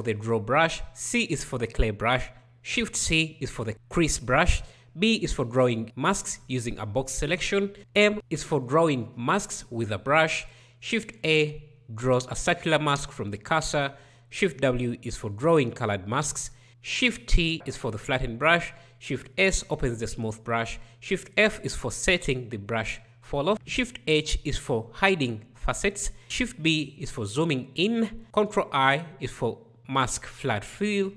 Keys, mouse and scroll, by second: 2.8 shift+c, 4.9 b, 7.8 m, 10.4 shift+a, 13.8 shift+w, 16.9 shift+t, 19.1 shift+s, 20.8 shift+f, 23.5 shift+h, 26.2 shift+b, 28.8 ctrl+i.